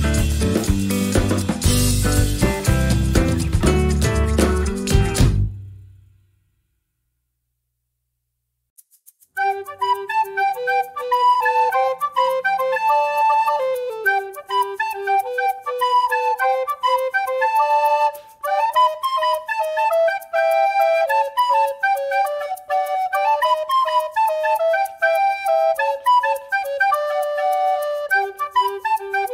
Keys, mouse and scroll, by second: 1.2 ctrl+g, 2.0-4.6 ctrl+drag, 4.7 click, 5.2 ctrl+scroll up 2, 5.6 ctrl+click, 7.2-9.0 drag, 9.8-10.9 drag, 11.2 click, 12.1 click, 13.3-14.3 ctrl+shift+drag, 14.4 ctrl+shift+click, 14.9 ctrl+shift+click, 15.7-17.2 drag, 17.7 click, 18.3 click, 18.7-21.8 drag, 22.1 click, 22.7-24.6 drag, 25.0 click, 25.4-25.8 ctrl+scroll down 2, 26.5 ctrl+scroll down 2, 26.9 ctrl+middle click, 27.7 ctrl+scroll up 1, 28.7-29.3 scroll up 1.